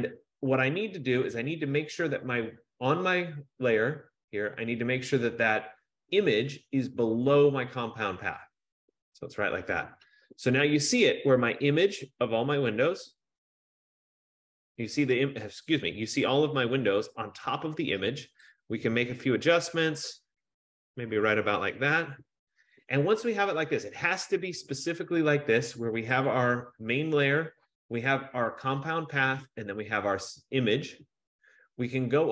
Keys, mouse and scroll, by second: 8.5 click, 11.8 F15, 22.0 click, 26.4 click, 28.4 click, 29.9 click.